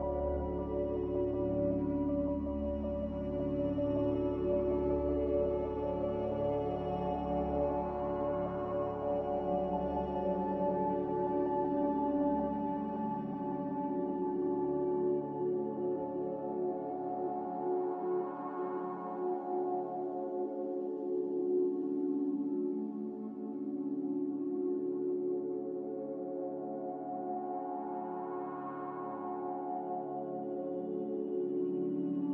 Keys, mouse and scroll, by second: 2.5 click, 5.9 Return, 11.0 typing, 11.1 Return, 22.0-22.8 typing, 24.0-24.7 typing, 26.8 Delete, 26.8 5, 27.7 click, 29.8 click.